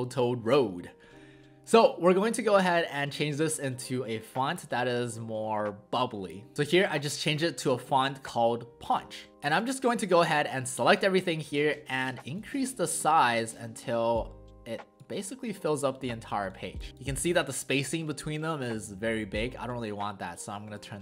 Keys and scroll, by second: 9.3 ctrl+z.